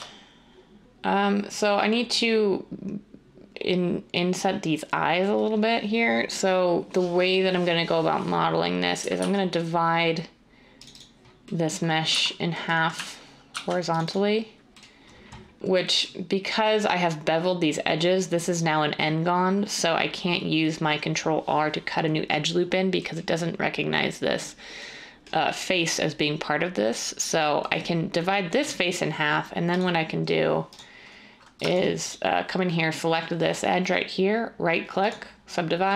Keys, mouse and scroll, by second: 9.2 ctrl+r, 12.1 z, 13.5 ctrl+r.